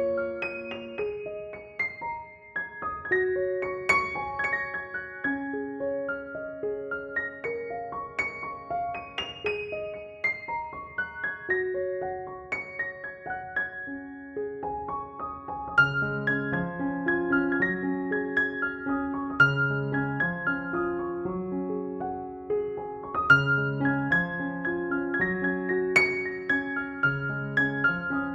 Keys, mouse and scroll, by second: 1.5 right click, 1.8 click, 2.3-6.4 typing, 3.8-4.6 click, 4.7 click, 6.5-7.9 drag, 8.0 space, 8.2-8.7 click, 8.5 space, 8.7-9.7 click, 9.9 x, 10.1 click, 10.7 space, 10.9 click, 11.1 space, 12.3-14.4 drag, 14.4 space, 15.1 click, 15.3-15.7 space, 15.6 x, 15.9-17.9 drag, 18.8 space, 19.0 click, 19.2 space, 20.0-20.5 drag, 23.2 ctrl+click, 23.5 ctrl+e, 24.4 space, 24.5 click, 24.8 space, 25.7 click, 27.7 ctrl+-.